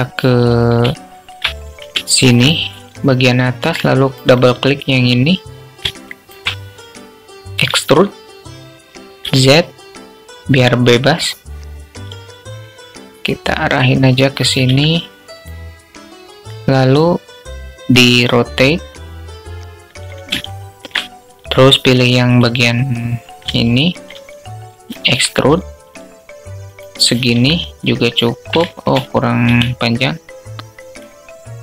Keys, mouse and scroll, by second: 0.4 shift+click, 1.4 alt+shift+click, 3.2 click, 3.6 click, 5.4 alt+shift+click, 7.0 e, 16.4-19.5 drag, 19.8 alt+shift+click, 21.8 click, 23.0 alt+shift+click, 24.4 e, 26.6 Tab, 28.0 shift+drag, 29.6 click.